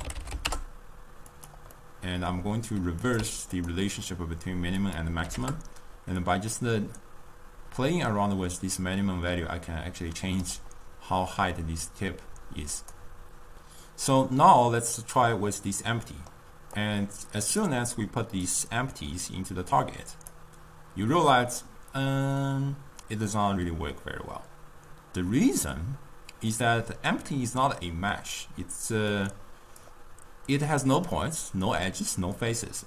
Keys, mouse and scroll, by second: 1.9-3.1 middle drag, 3.1 click, 5.0-9.9 drag, 12.9 click, 15.4-16.8 middle drag, 16.8 click, 18.5-21.7 drag, 21.7-24.8 middle drag, 27.1-29.4 middle drag, 29.4-32.8 drag.